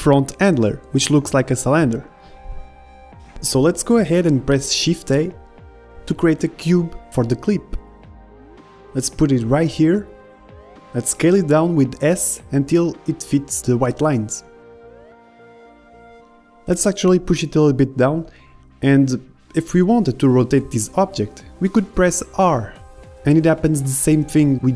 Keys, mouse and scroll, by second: 5.7 shift+a, 9.2 g, 11.5 s, 13.4-14.5 middle drag, 14.3 click, 14.7 s, 14.9 middle click, 15.2 s, 15.9 click, 16.5 middle click, 18.1-21.5 drag, 22.3-24.7 middle drag.